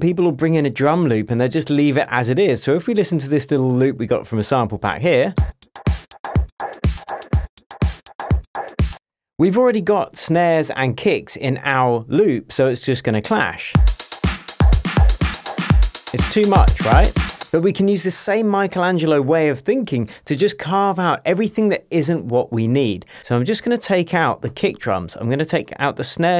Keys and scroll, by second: 5.4 space, 9.1 space, 13.9 super+space, 14.7 space, 17.4 space.